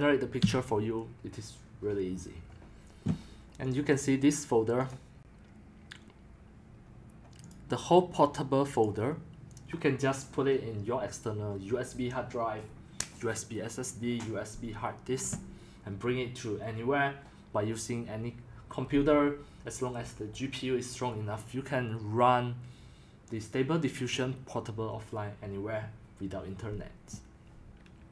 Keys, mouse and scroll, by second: 0.4 Escape, 3.8 click, 8.6 click, 8.9 click.